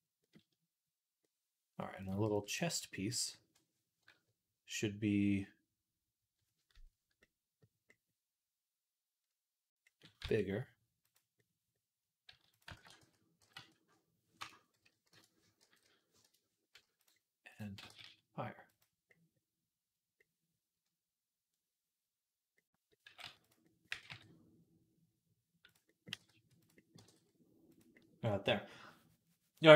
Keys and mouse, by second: 2.1 b, 10.0 s, 12.1 s, 12.6 ctrl+a, 13.2 g, 15.4 g, 17.7 g, 20.0 middle click, 20.8-25.7 drag, 22.9 g, 23.7 g, 25.8-29.7 drag, 25.8 g, 26.0 g, 26.8 g.